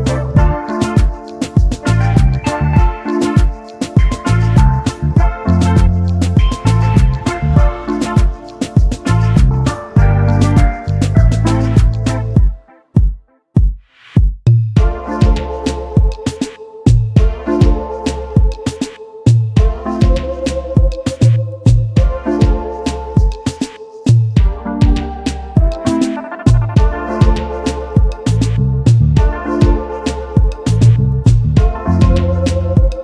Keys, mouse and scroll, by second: 3.3 shift+click, 4.9 alt+scroll down 1, 6.9 alt+scroll up 1, 7.4 double click, 8.0 alt+scroll up 1, 8.9 double click, 9.8 typing, 10.9 typing, 11.5 alt+scroll down 1, 12.5 double click, 14.8-15.2 alt+scroll down 1, 15.4 space, 16.5-16.9 alt+scroll down 1, 16.9 alt+click, 17.2 space, 18.3 double click, 18.7 space, 21.3 alt+scroll up 1, 22.0 right click, 24.2 double click, 26.9 shift+click, 28.4 space, 28.5 double click, 30.2-32.1 typing, 31.5 double click.